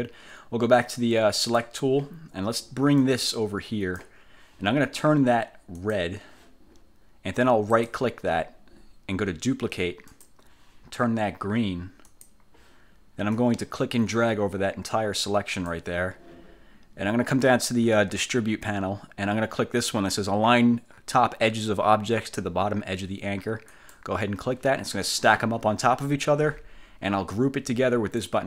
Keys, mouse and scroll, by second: 1.5 click, 3.1 click, 5.9 click, 7.9 click, 10.2 click, 12.2 click, 13.5-16.0 drag, 23.8 click, 28.3 click.